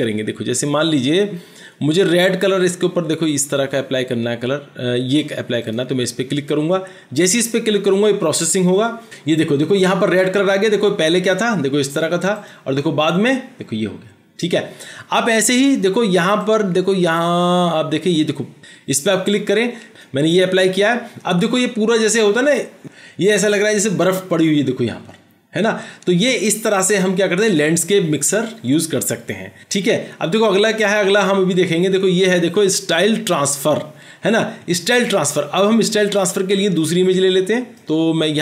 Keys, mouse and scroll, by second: 17.5 double click.